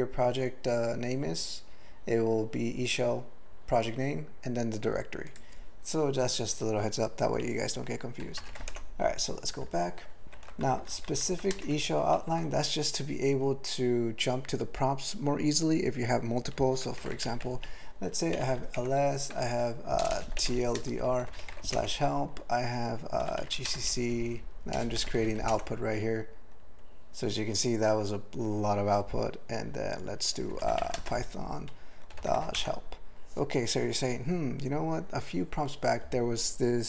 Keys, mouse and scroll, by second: 5.3 click, 8.2 typing, 8.7 Return, 10.2 ctrl+n, 10.6 alt+b, 10.8 alt+b, 11.0 alt+b, 11.1 alt+b, 11.3 alt+b, 11.5 ctrl+space, 11.7 ctrl+alt+f, 12.2 ctrl+g, 18.3-20.2 typing, 18.8 Return, 21.8 Return, 23.2-25.2 typing, 25.5 Return, 30.5-32.3 typing, 32.6 Return.